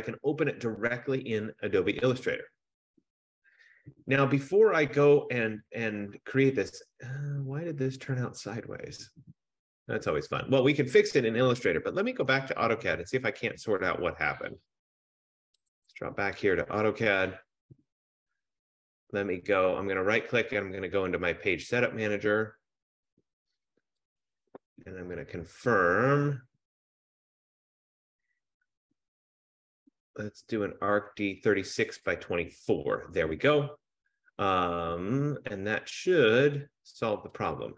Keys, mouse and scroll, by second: 16.5-19.3 drag, 20.7 F15, 22.5 click, 24.3 click, 29.9 click, 32.2 click.